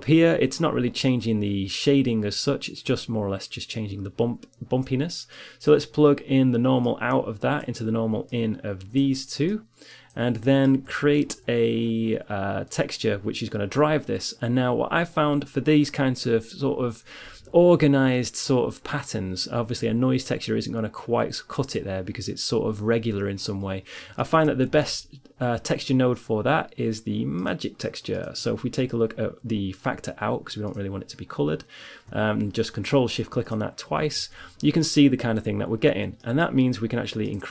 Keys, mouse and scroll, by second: 5.8-8.1 drag, 8.3-10.0 drag, 10.0 middle click, 10.5 shift+a, 24.5 middle click, 25.2 shift+a, 30.2-32.5 drag, 33.0-35.7 drag, 36.7-37.5 middle drag.